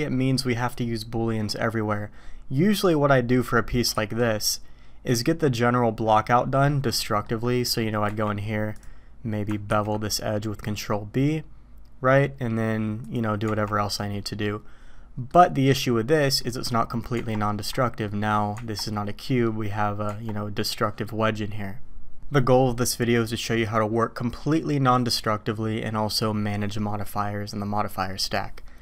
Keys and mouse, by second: 3.9 shift+a, 6.7 drag, 6.9-7.2 middle drag, 7.7 middle click, 8.1 Tab, 8.8 click, 9.7 ctrl+b, 13.4 Tab, 14.4-15.3 drag, 16.1 click, 17.1 Tab, 18.0 click, 18.5 Tab, 19.3 drag, 20.1 Tab.